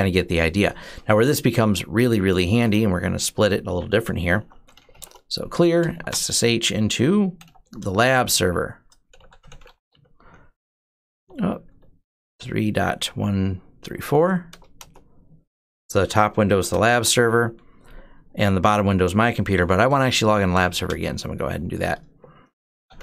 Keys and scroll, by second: 2.8 typing, 4.2-17.1 typing, 20.1-23.0 typing.